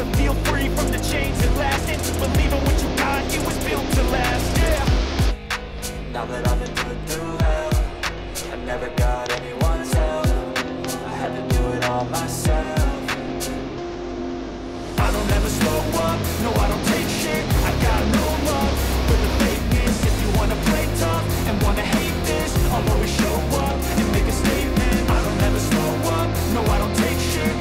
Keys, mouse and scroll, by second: 0.1 Return, 2.3-3.3 drag, 5.5 middle click, 6.0 middle click, 6.7 right click, 8.1 click, 9.3-10.4 drag, 16.9-18.1 drag, 23.6-24.8 drag, 26.2-27.3 drag.